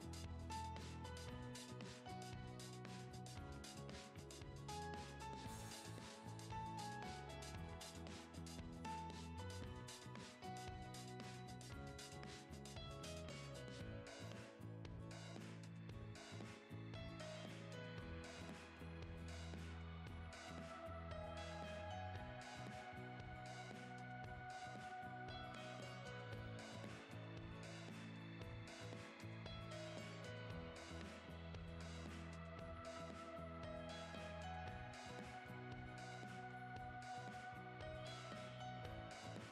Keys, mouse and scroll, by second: 39.3 click.